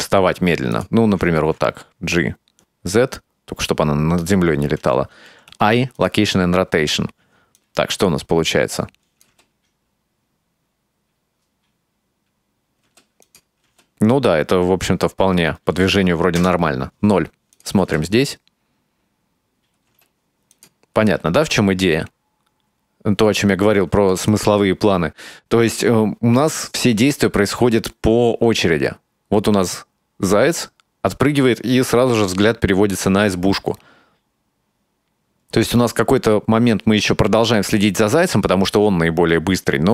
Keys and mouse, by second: 1.4 g, 5.3 i, 7.6-9.3 drag, 9.3 space, 12.9 space, 13.3 click, 13.7 space, 15.8 space, 16.4 KP_0, 17.6 click, 17.9 space, 20.0 space, 20.6 click, 21.1 space, 24.0 space, 24.3-39.9 drag.